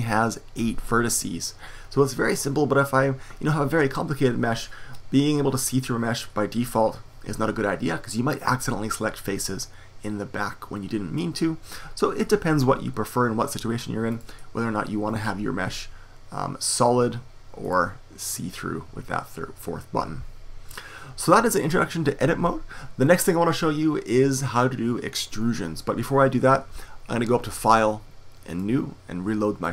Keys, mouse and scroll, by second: 8.3-9.3 drag, 9.9-14.0 right drag, 14.0-29.7 drag.